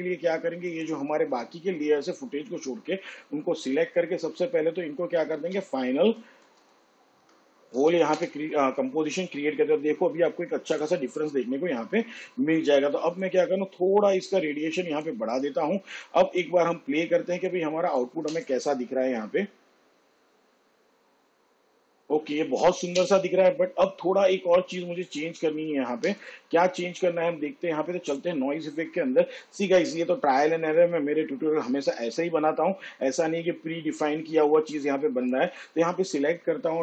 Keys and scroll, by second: 5.7-9.1 typing, 19.1 space, 23.6 space, 26.8 space, 33.5 shift+/.